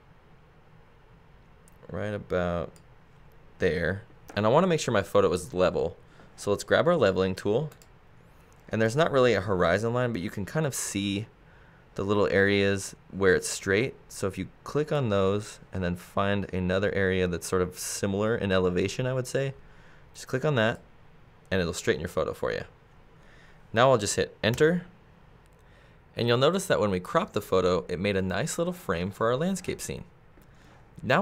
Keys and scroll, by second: 24.5 Return.